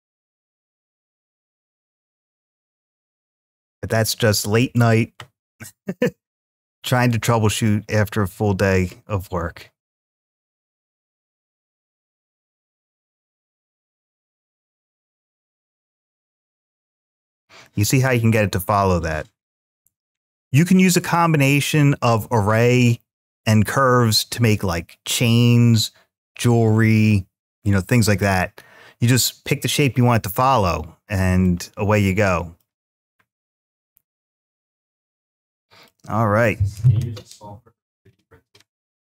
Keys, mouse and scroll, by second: 0.5-1.2 shift+middle drag, 1.4-4.6 middle drag, 6.9-16.5 drag, 16.8-18.2 middle drag, 18.3-19.6 scroll up 1, 19.6-24.3 drag, 31.2-32.4 middle drag, 33.1-33.9 scroll down 1, 33.9-34.3 scroll up 2, 34.3-35.7 middle drag.